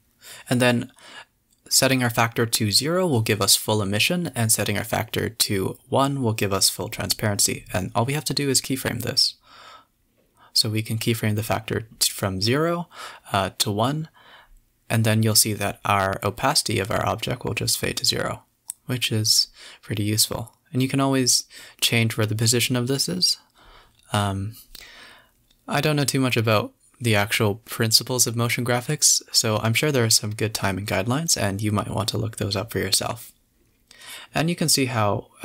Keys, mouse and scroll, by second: 1.5-2.5 drag, 2.5 space, 7.3 click, 8.7-9.2 drag, 9.2 z, 11.6 i, 12.5-16.2 drag, 17.7-18.3 drag, 18.3 space, 18.5 scroll up 2, 18.9 scroll down 2, 19.8 space, 20.1 space, 20.7 space, 21.8 space, 22.0 space, 24.5 click, 25.4 space, 27.6 space, 28.3-28.8 Right, 29.0 Right, 29.1 Left, 29.3 Right, 29.5 Right, 29.8 Left, 30.8 Right, 32.3 alt+i, 33.7 Right, 34.1 Right, 34.3 Right, 34.5 Right, 35.2 Right.